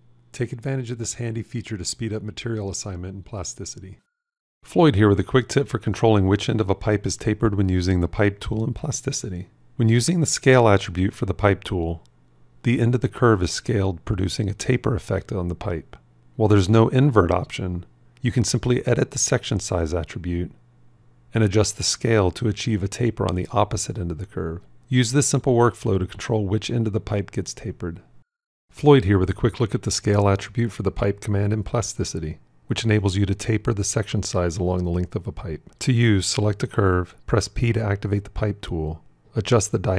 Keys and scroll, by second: 37.7 p.